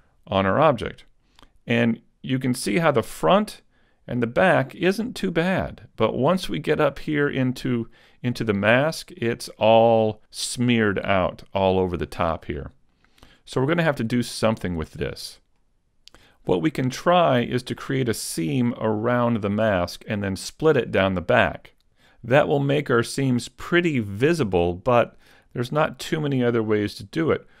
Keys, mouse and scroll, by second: 0.6 middle click, 2.8 middle click, 6.8 shift+middle click, 7.3-8.0 scroll up 3, 7.8 middle click, 8.6 shift+middle click, 9.2 middle click, 10.8 middle click, 12.5 middle click, 15.1-15.6 scroll down 1, 15.6 shift+middle click, 17.4 middle click, 21.9 middle click, 21.9 scroll down 1, 25.8 middle click.